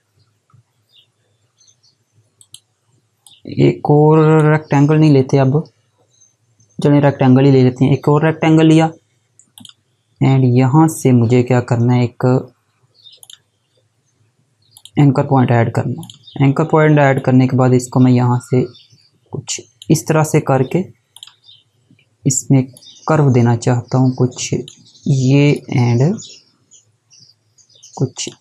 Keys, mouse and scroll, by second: 2.0 click, 9.2 click, 12.8 click.